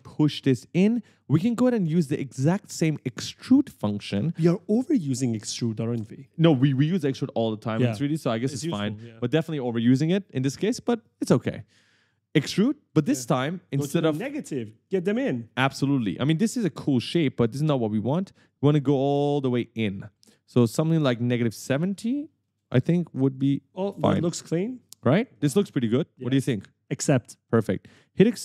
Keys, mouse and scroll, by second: 2.1 right click, 12.5 click, 13.9 right click, 15.9 right click, 18.6 click, 21.2 click, 24.5 right click, 24.6 a, 25.5 d, 26.3 a.